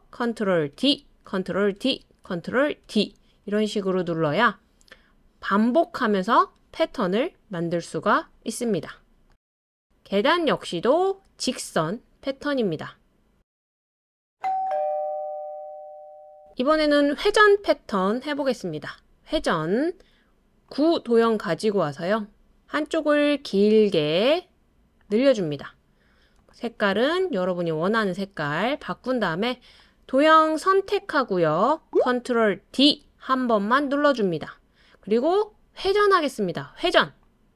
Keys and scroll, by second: 0.7 super+d, 1.8 super+d, 2.8 super+d, 32.7 super+d.